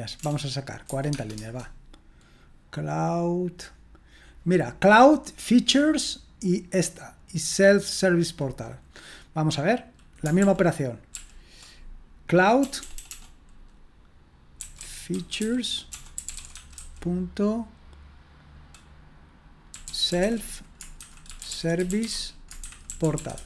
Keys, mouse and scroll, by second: 0.0-1.1 typing, 1.3 Return, 6.3-10.4 drag, 10.4 ctrl+p, 11.1 ctrl+p, 12.6 BackSpace, 12.7 BackSpace, 12.9 BackSpace, 13.0 BackSpace, 14.5-17.2 typing, 19.4-23.4 typing.